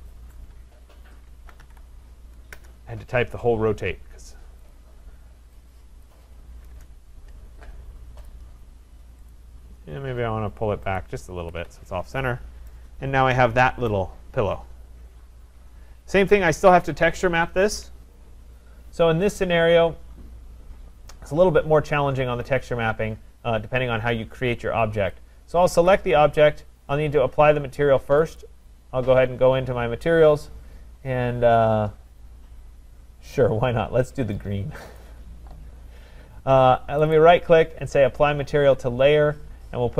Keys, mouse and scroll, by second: 0.0-2.1 typing, 2.6 Return, 4.7 click, 6.7 Return, 6.7 click, 8.3 click, 9.3 click, 11.0 click, 11.4 Escape, 11.6 Escape, 11.7-12.7 scroll down 4, 12.7 right click, 13.0-13.4 scroll down 2, 13.4 scroll, 13.9 right click, 15.7-16.3 scroll, 16.9-17.6 scroll, 25.9 click, 28.4 click, 30.3-30.9 scroll, 31.9-33.4 scroll, 35.0 click, 37.2 right click.